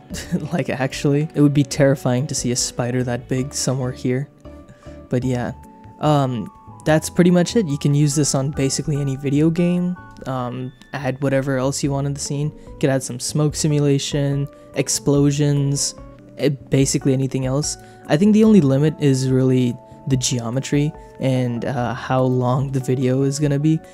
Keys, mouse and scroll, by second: 0.1 click, 0.8 click, 1.1 space, 1.3 space, 2.5-17.7 drag, 18.1 middle click, 19.0 shift+middle click, 22.3 middle click, 23.3 click.